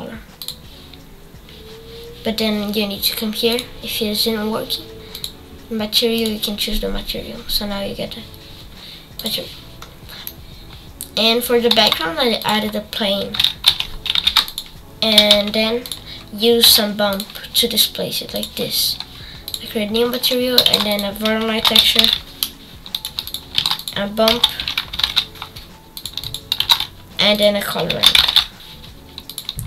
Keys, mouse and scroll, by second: 0.4 click, 5.2-9.8 drag, 9.8-10.2 scroll down 2, 10.2-12.4 middle drag, 12.4 shift+a, 13.4 r, 15.1 g, 16.3 scroll down 5, 16.6 s, 18.4 click, 19.5 click, 20.2 shift+middle click, 20.7 shift+a, 22.3 click, 23.0 shift+a, 26.0 shift+a, 29.3 shift+a.